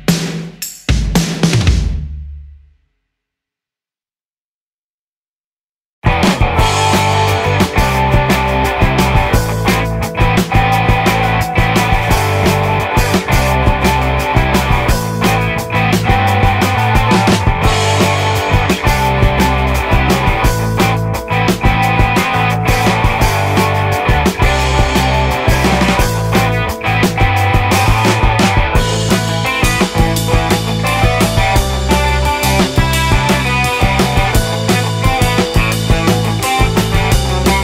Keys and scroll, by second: 1.4 ctrl+z, 4.8 space, 8.1 ctrl+z, 9.4 ctrl+z, 14.9 space, 16.5 space, 16.6 space, 17.3 space, 18.5 space, 21.1 ctrl+z, 21.1 space, 24.1 ctrl+z, 24.9 ctrl+z, 25.6 ctrl+z, 25.7 space, 26.2 ctrl+z, 26.6 ctrl+z, 28.6 space, 33.6 space, 34.5 ctrl+z, 36.7 space, 37.2 ctrl+z.